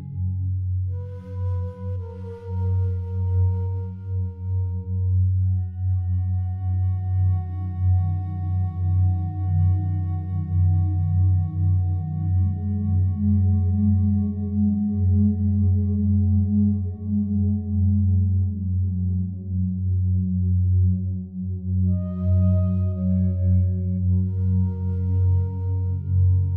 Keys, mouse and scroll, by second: 0.2 alt+shift+click, 1.1 Tab, 6.5 click, 9.8 /, 10.7 click, 11.9 click, 12.5 click, 13.2 click, 14.4 g, 16.2 Escape, 18.1-19.4 drag, 19.6-22.2 drag, 24.0-24.8 shift+drag, 24.1 shift+middle click.